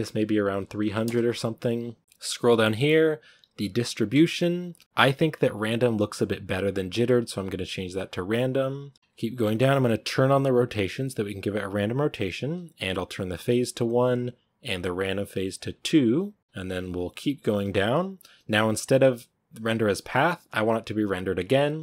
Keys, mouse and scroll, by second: 0.9 0, 6.2-10.5 drag, 13.1-21.8 drag.